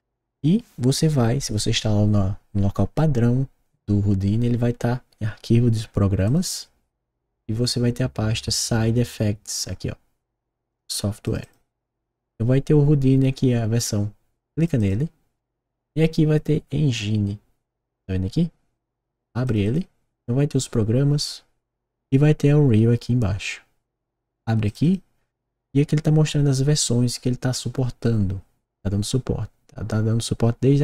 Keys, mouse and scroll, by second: 6.2 click, 6.4 click, 10.6 click, 11.2 click, 11.4 click, 14.5 click, 14.7 click, 19.4 click, 19.6 click, 24.6 click, 24.8 click.